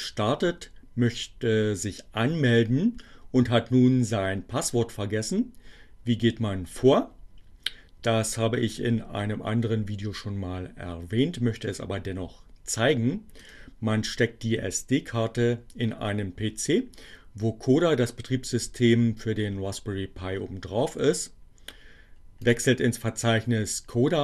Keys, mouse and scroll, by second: 13.0 click, 22.1 click.